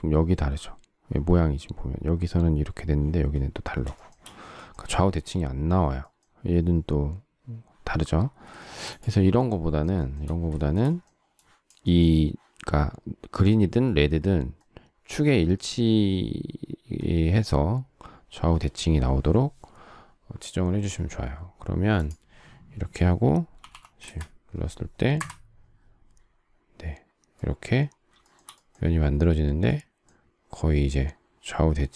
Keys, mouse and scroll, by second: 3.9 shift+middle click, 8.5 shift+middle click, 10.1 shift+middle click, 10.5 shift+middle click, 23.3-24.2 typing, 28.2 shift+middle click.